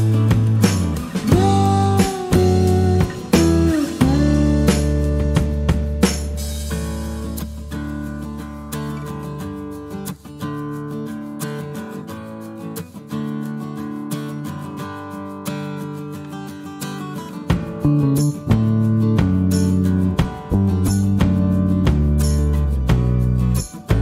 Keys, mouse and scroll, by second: 0.7 click, 3.6 click, 5.1 middle click, 5.3 click, 8.9 click, 11.5 click, 12.7 click, 13.6 click, 14.2 click, 14.8 click, 15.1 click, 16.7 click, 17.3 click, 17.9 -, 19.1 click, 20.0 -, 20.4 click, 22.1 click, 22.3 middle click, 22.7 middle click, 23.8 click.